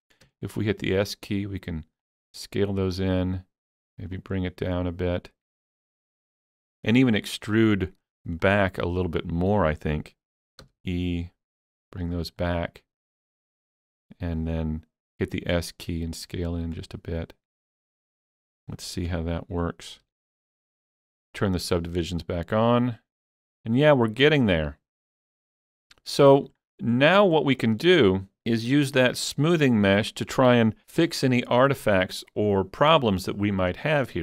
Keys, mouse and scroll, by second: 0.3 s, 2.1 click, 3.3 click, 5.3-7.2 middle drag, 7.2-12.4 middle drag, 10.7 e, 12.1 click, 12.4-17.7 middle drag, 15.0 s, 16.6 click, 17.7-19.1 drag, 18.8-19.1 scroll down 1, 19.1 Tab, 20.1 alt+a, 20.2 scroll down 3, 20.4 middle click, 21.2 click, 22.3-27.7 middle drag, 27.4 scroll up 1, 27.7 shift+middle click, 28.0-29.1 shift+middle drag, 31.5-34.2 shift+middle drag, 31.5 scroll up 1.